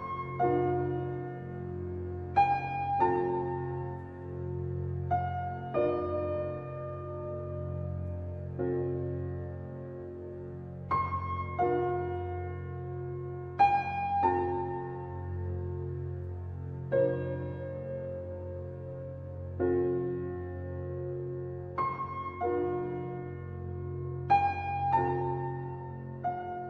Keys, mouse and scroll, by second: 0.9-2.3 middle drag, 2.3 ctrl+click, 3.0-5.3 middle drag, 5.3 ctrl+b, 10.6 middle click, 11.5 scroll up 1, 11.7 shift+middle click, 12.3 scroll up 2, 12.6-13.7 shift+middle drag, 13.7 click, 15.2 click, 16.5 ctrl+KP_Add, 17.7 x, 21.3 click, 22.0 scroll up 1, 22.3 shift+middle click, 22.7-24.0 scroll up 1, 24.0 click, 24.5 x.